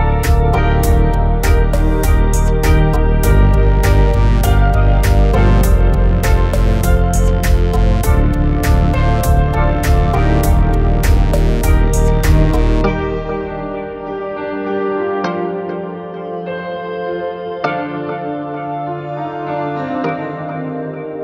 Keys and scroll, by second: 20.7 Delete.